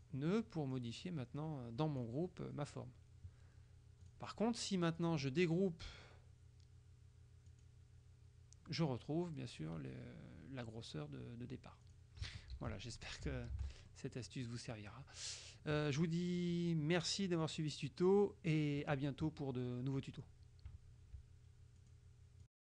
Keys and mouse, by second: 0.8-2.6 drag, 4.1 click, 5.1 click, 7.5 click, 11.9 click, 12.7 ctrl+z, 13.7 ctrl+shift+z, 14.0 ctrl+shift+click, 15.9 KP_Subtract, 17.1 click, 18.6 click, 21.9 click.